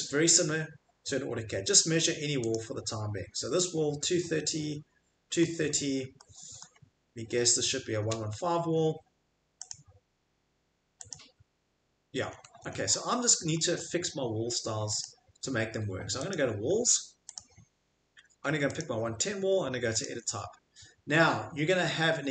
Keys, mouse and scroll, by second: 0.2-1.6 scroll, 2.5 click, 5.4 middle click, 5.7 Escape, 6.6 middle click, 7.2 middle click, 7.3 middle click, 7.4 middle click, 7.7 middle click, 9.7 click, 11.1 click, 12.3 middle click, 12.5 Escape, 12.5 middle click, 12.7 middle click, 12.8 middle click, 13.3 Escape, 13.7 middle click, 15.0 click, 16.4 click, 17.4 click, 18.8 click, 20.0 click.